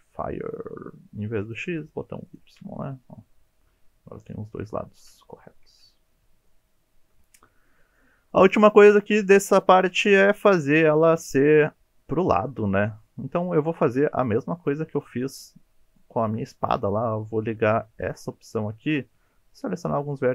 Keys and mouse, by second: 1.5 click, 1.8 click, 2.3 click, 3.0-4.6 middle drag, 5.1 KP_3, 5.7 KP_1, 6.5 shift+click, 7.7 shift+middle click, 8.3 shift+middle click, 13.6 shift+middle click, 14.2 1, 14.4 click, 18.0 click, 20.0 g.